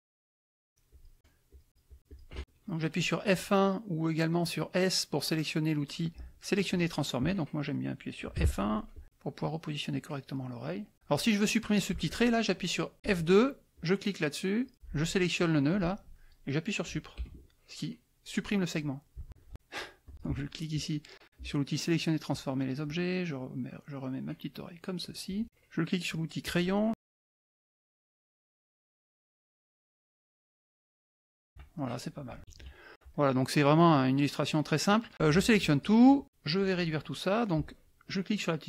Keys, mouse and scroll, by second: 0.0 click, 0.6 shift+click, 1.5 shift+click, 8.4 F1, 8.9-11.1 drag, 13.0 F2, 13.7 click, 14.6 click, 15.5-16.5 drag, 17.2 Delete, 20.0 click, 22.3 click, 22.8-25.3 drag, 26.4 click, 26.9 click, 27.4 shift+click, 28.1 shift+click, 29.1 shift+click, 29.8-31.6 shift+drag, 31.7 shift+middle click, 32.4 shift+F1, 32.5 shift+KP_Subtract, 33.1 click, 33.7 click, 34.2 click, 35.1 click.